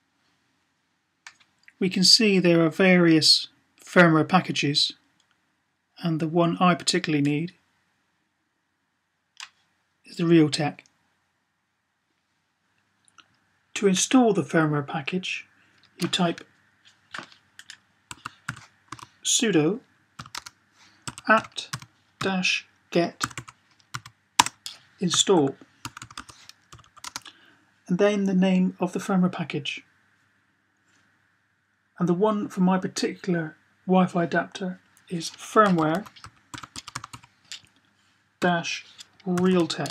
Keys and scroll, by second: 17.7-18.7 typing, 20.0-23.7 typing, 25.0-26.8 typing, 35.6-37.0 typing, 38.2-39.9 typing.